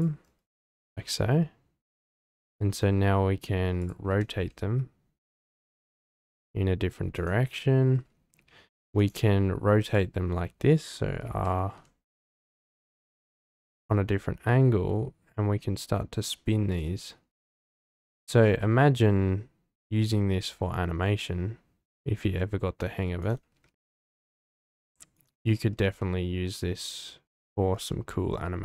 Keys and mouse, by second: 0.7 r, 0.9 z, 4.1 g, 4.3 y, 8.3 t, 9.0 click, 11.2 r, 11.6 x, 11.8 x, 16.7-18.1 drag, 18.1 r, 18.4 x, 23.5 r, 23.6 z, 25.5 g, 25.8 x.